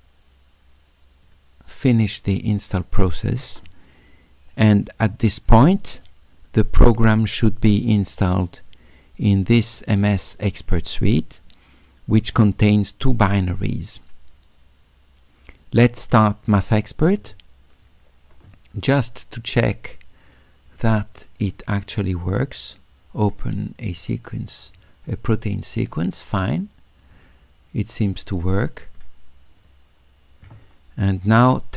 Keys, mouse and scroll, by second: 1.2 click, 4.5 click, 6.0-8.5 middle drag, 10.7 click, 16.1 click, 19.6 click, 20.7 click, 21.9 click, 23.2 click, 23.9 click, 25.1 click, 27.1 click, 28.3 click, 28.9 click, 29.6 click.